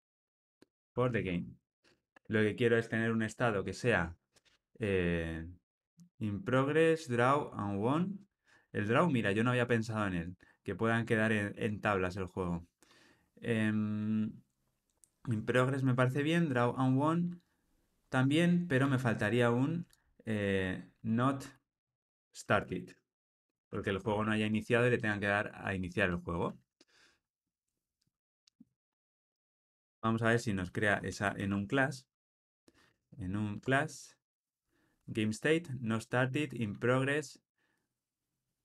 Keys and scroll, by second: 18.8 Tab, 28.1 Tab, 33.5 Tab.